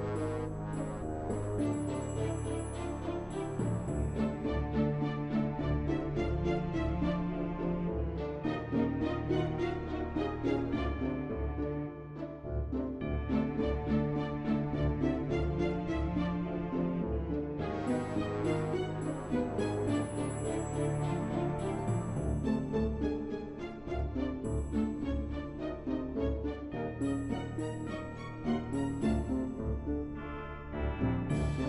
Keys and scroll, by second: 30.9 b.